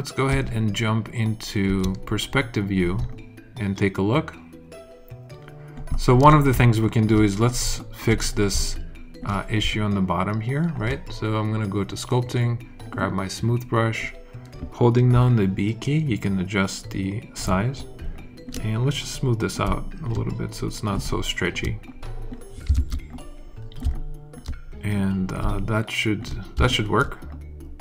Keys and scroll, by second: 0.2 space, 1.6 space, 15.1 b, 22.7 super+z, 23.8 alt+super+z.